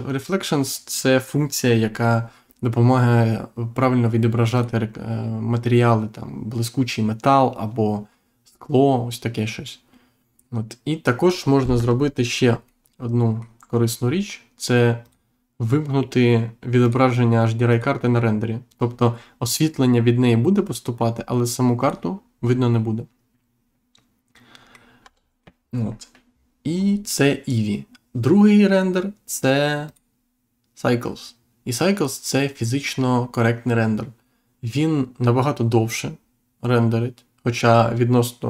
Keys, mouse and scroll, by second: 4.5 click, 11.7 Insert, 12.3 scroll up 1, 12.7 middle click, 15.0 click, 16.8 click, 17.7 click, 21.7 click, 22.7 middle click, 25.0 Insert, 26.7-27.1 scroll up 1, 29.8 click.